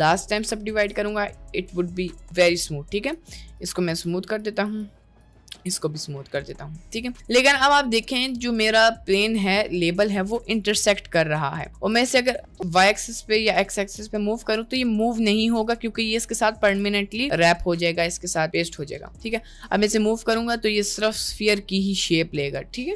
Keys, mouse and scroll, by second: 0.2 Tab, 0.2 click, 0.7 Tab, 0.9-2.0 middle drag, 3.1 click, 3.7 click, 4.6 click, 5.6 click, 6.3-7.0 middle drag, 7.5 click, 7.8-8.8 middle drag, 8.9-9.3 middle drag, 9.8 click, 10.1 click, 10.9 ctrl+z, 11.4-11.8 middle drag, 12.0 g, 12.6 middle click, 12.8 g, 13.8 g, 14.9 g, 15.6 middle click, 16.7 g, 19.1 middle click, 19.7 g.